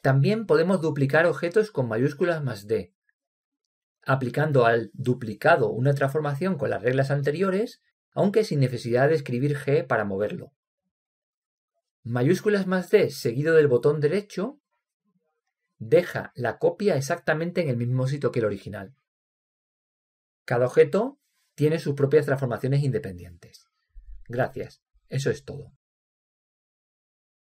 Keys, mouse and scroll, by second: 3.3 shift+d, 14.1 shift+d, 18.7-20.5 drag, 24.8-27.3 right drag.